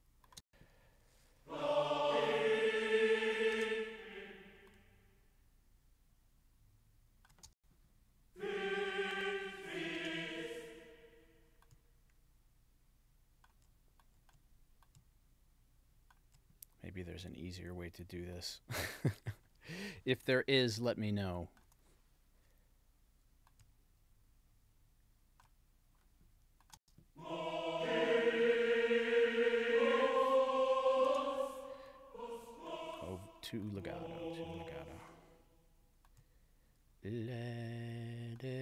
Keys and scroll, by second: 0.4 space, 3.5 space, 7.5 space, 10.0 space, 26.8 space, 31.1 space.